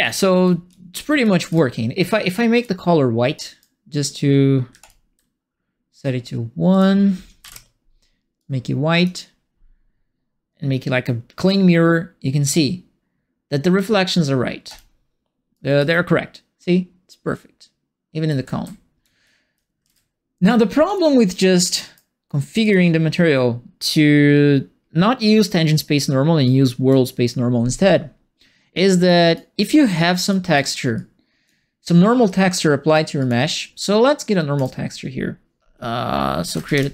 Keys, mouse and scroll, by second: 0.0-1.2 typing, 2.5 click, 3.3 right click, 4.7 1, 4.8 click, 6.7 click, 7.4 KP_1, 8.3 click, 11.3 click, 15.4-16.2 typing, 15.5-19.8 right drag, 17.3 w, 18.4-20.3 typing, 20.8 click, 21.7 right click, 22.6 click, 26.4 click, 29.0 right click, 29.5 right click, 30.3 right click, 30.9 click, 32.2 click, 33.1 click, 34.5 right click, 36.2-36.9 typing.